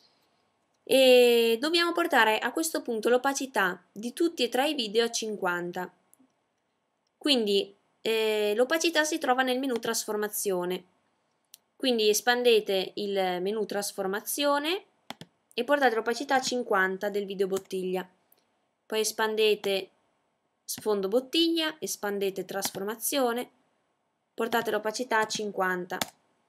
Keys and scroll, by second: 14.5 typing, 16.5 typing, 24.2-25.0 typing.